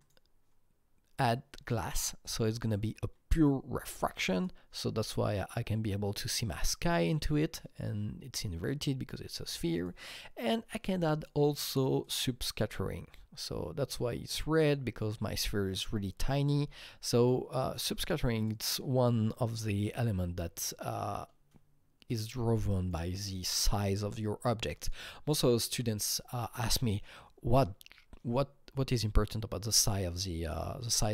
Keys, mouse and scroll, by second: 1.1-4.3 drag, 4.3-6.9 drag, 9.7 click, 10.6-14.6 drag, 16.4 alt+Num_Lock, 16.4-17.5 drag, 16.5 alt+right click, 17.0 alt+right click, 17.5 alt+right click, 18.3 click, 18.5 alt+right click, 19.6 r, 20.5-25.3 drag, 25.6 click, 25.6 r, 26.1 q, 26.4-30.1 alt+drag, 27.1-30.1 alt+right drag, 30.4-31.1 alt+drag, 30.4-31.1 alt+right drag.